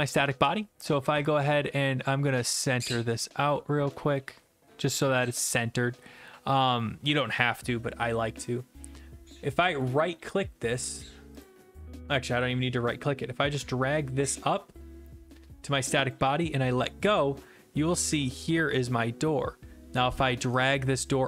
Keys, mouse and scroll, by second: 2.9 click, 3.5 click, 4.1 0, 4.3 Tab, 5.4-6.6 d, 6.8 middle click, 7.7 click, 9.8 right click, 11.4 click, 16.1 click, 17.4-19.0 typing, 19.2 middle click.